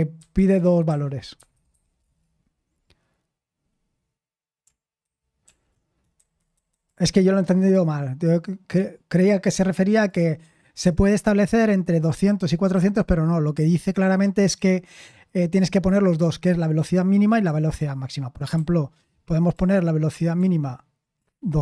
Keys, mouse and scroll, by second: 5.0 ctrl+c, 5.0 typing, 5.4 ctrl+p, 6.1 Left, 6.4 Left, 6.5 Left, 6.7 Left.